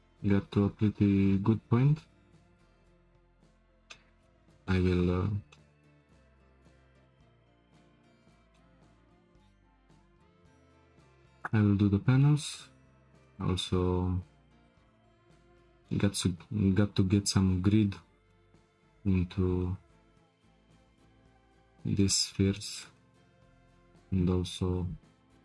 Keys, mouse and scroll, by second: 3.5-3.9 scroll up 2, 3.9 shift+middle drag, 4.2 scroll down 1, 4.3-5.2 middle drag, 5.2-5.6 scroll down 2, 5.6-7.7 shift+middle drag, 7.7-8.0 scroll down 2, 8.0-10.9 shift+middle drag, 10.9-11.5 scroll up 3, 11.5-12.2 scroll up 1, 12.2-16.3 shift+middle drag, 18.3-18.7 shift+middle drag, 18.7 click, 19.0-20.0 middle drag, 20.0-20.3 scroll up 3, 20.3-21.7 shift+middle drag, 21.7-22.1 scroll down 2, 22.1-25.4 shift+middle drag.